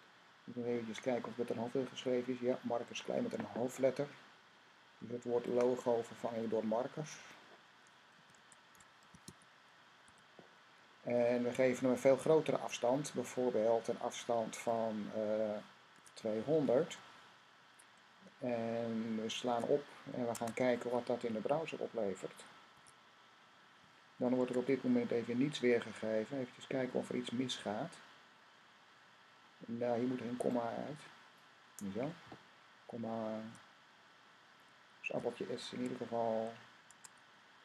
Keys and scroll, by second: 8.0-9.9 typing, 15.6-16.7 typing, 19.3 typing, 19.4 super+s, 20.1 Tab, 22.6 r, 24.3 Tab, 24.5 typing, 34.9 s, 36.7 Tab.